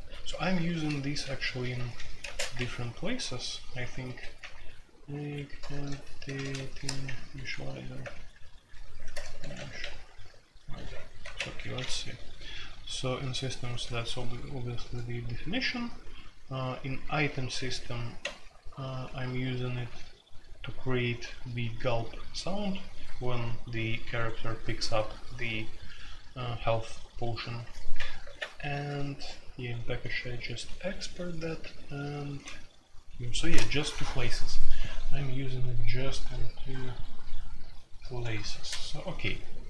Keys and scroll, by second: 0.0-9.8 typing, 11.0-13.3 typing, 15.1-16.2 typing, 18.2 ctrl+o, 28.2 alt+3, 28.7 typing, 30.1 typing, 31.6-31.9 typing, 33.4 ctrl+o, 38.3 ctrl+g, 38.5 ctrl+g, 39.2-39.6 typing.